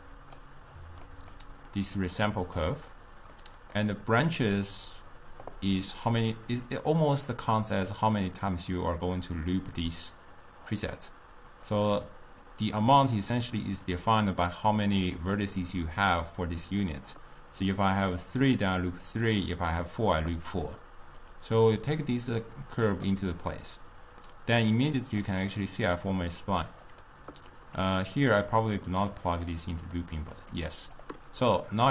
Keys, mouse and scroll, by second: 1.1-1.8 middle drag, 1.8-3.5 drag, 3.5-6.5 middle drag, 11.6 click, 12.0-15.1 drag, 18.3-23.8 drag, 23.8-27.0 middle drag, 27.0 click, 28.5-30.0 drag, 30.2 click, 30.6 click, 31.6-31.9 middle drag.